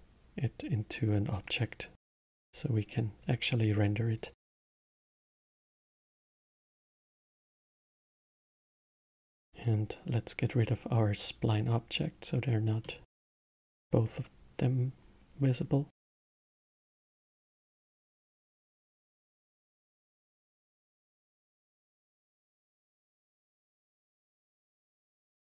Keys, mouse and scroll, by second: 2.3 click, 4.0-5.5 drag, 7.1 click, 8.7-10.8 middle drag, 10.8 click, 11.7 click, 12.8-16.4 middle drag, 16.8 click, 16.9-20.1 drag.